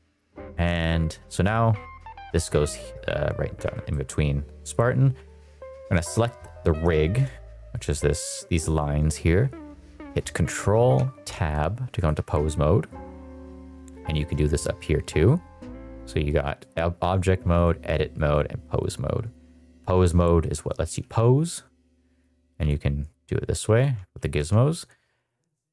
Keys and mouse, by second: 3.8 shift+middle click, 5.8 click, 10.9 ctrl+Tab, 11.9 click, 13.5 click, 15.9-16.7 drag, 17.5 click, 19.2 click, 19.6 g, 20.8 Escape, 21.4 click, 22.2 click, 23.1 click, 24.1 alt+g.